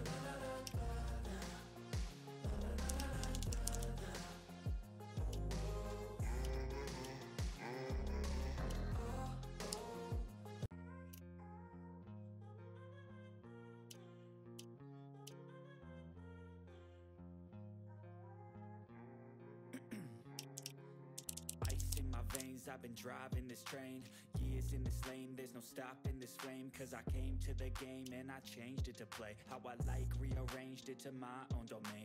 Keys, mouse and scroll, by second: 2.9-4.2 typing, 5.2 typing, 5.6 ctrl+scroll down 1, 6.3 ctrl+scroll up 1, 7.0 ctrl+scroll down 1, 7.5 click, 8.6 typing, 8.7 ctrl+scroll up 1, 9.0 click, 10.1 click, 13.8 ctrl+scroll down 1, 14.2 ctrl+middle click, 14.6-14.9 ctrl+scroll down 1, 14.9 ctrl+middle click, 15.9-16.2 ctrl+scroll down 1, 16.9 click, 18.8 click, 19.6-22.8 typing, 23.8 click, 27.2 typing, 28.0 ctrl+scroll up 1, 28.4-31.8 drag.